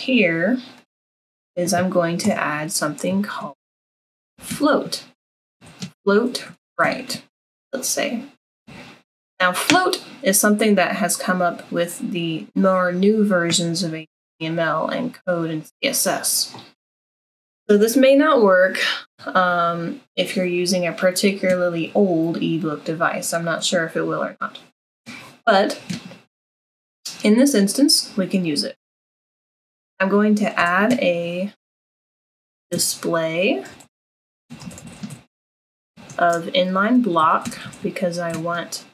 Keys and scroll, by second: 2.3 Return, 3.2 Tab, 4.1-9.2 typing, 30.6 Return, 31.8 Tab, 32.5-38.9 typing.